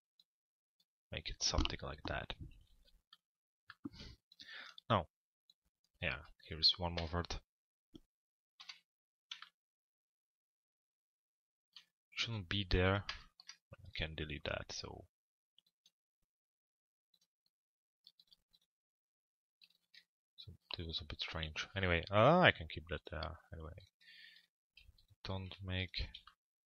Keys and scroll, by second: 6.9 BackSpace, 8.6 p, 12.7 BackSpace, 19.6 Delete.